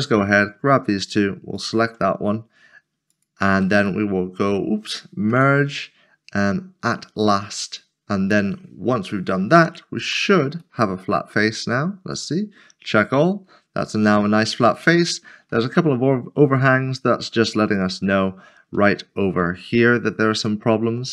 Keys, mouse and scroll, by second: 3.1 shift+click, 3.8 right click, 5.3 m, 7.2 click, 8.5 scroll down 1, 10.1 a, 12.1 click, 14.8 click, 15.0 middle click, 17.6 middle click, 18.0 click, 18.2 middle click, 18.9 shift+middle click, 19.8 scroll up 1, 20.4 shift+middle click.